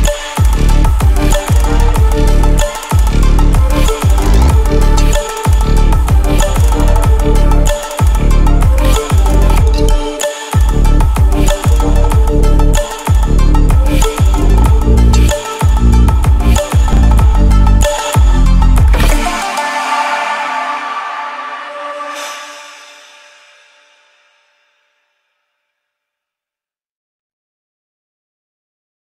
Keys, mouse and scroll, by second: 1.8 scroll down 1, 2.6 alt+scroll down 1, 3.2 alt+scroll up 1, 4.2 alt+scroll up 1, 4.6 alt+scroll down 1, 6.3-8.1 drag, 8.1 ctrl+a, 9.8 click, 12.4 click, 14.6 ctrl+0, 15.7 alt+scroll down 1, 16.5-16.8 scroll down 1.